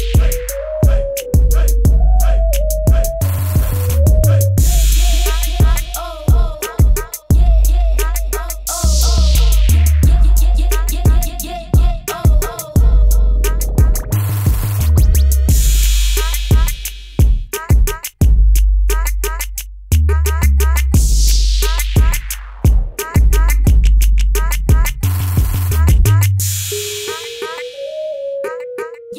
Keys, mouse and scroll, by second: 2.4 -, 3.6 click, 11.3-12.3 typing, 11.4 click, 14.3 b, 14.7 click, 16.1 space, 16.3 click, 17.0 z, 17.5 click, 20.2 v, 20.5 click, 21.1 ctrl+=, 21.3 typing, 21.7 click, 23.5 click, 24.1 ctrl+w, 24.7 click, 26.0 Tab, 28.9 click.